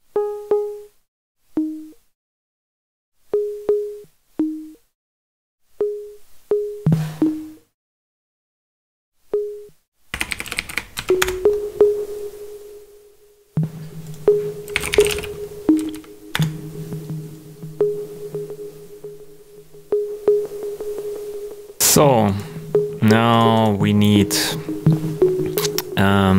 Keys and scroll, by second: 9.8-11.1 typing, 11.2 Return, 14.4-15.5 typing, 15.7 Down, 16.3 Return.